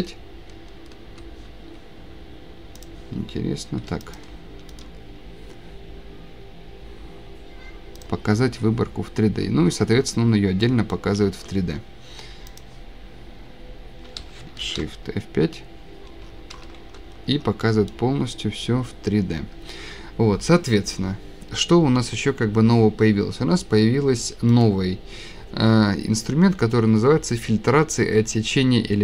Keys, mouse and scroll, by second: 2.9 click, 3.8 Escape, 4.2 click, 8.0 click, 9.3-9.7 scroll down 10, 9.8 scroll, 9.9 scroll up 1, 9.9 scroll down 6, 10.0 scroll, 10.6-11.0 scroll down 2, 11.2 Escape, 12.6 click, 12.6 scroll, 14.6 F5, 16.3 scroll down 7, 16.5-17.2 scroll, 17.8 shift+scroll, 24.6 click.